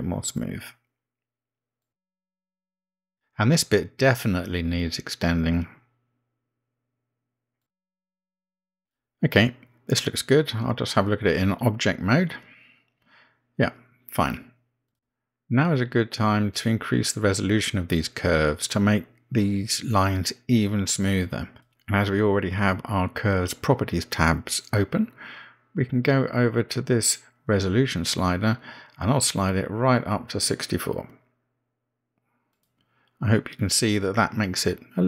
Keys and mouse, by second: 8.0 g, 9.9 x, 14.3 Tab, 15.3-16.4 middle drag, 16.9-19.4 middle drag, 21.8-22.3 middle drag, 23.8-24.9 middle drag, 30.8-33.9 drag, 34.5-35.0 middle drag.